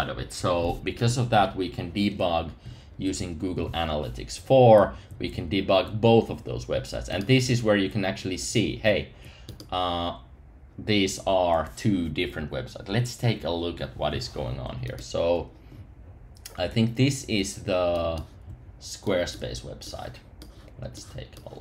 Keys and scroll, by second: 2.6 Up, 16.9 super+§.